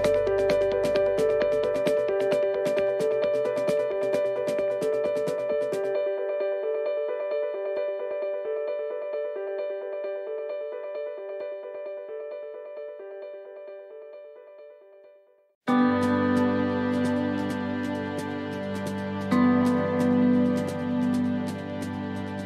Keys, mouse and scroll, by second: 1.5 click, 7.2-7.8 scroll up 4, 7.8 shift+middle click, 8.4 middle click, 9.0-9.4 scroll down 4, 9.4 shift+middle click, 10.0 middle click, 10.8-11.5 scroll up 4, 11.2 middle click, 12.7 scroll down 1, 13.2 middle click, 13.7-14.2 scroll down 2, 14.3 shift+middle click, 14.8-15.6 scroll down 2, 16.0 shift+d, 17.7 click, 22.3 click.